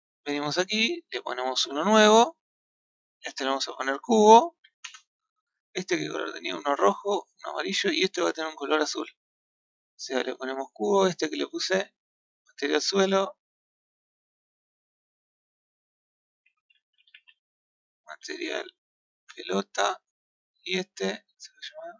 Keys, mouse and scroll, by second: 1.8-5.7 drag, 5.8 click, 7.8 click, 11.2 click, 12.4 click, 14.2 click, 15.1-18.1 drag, 20.7 click.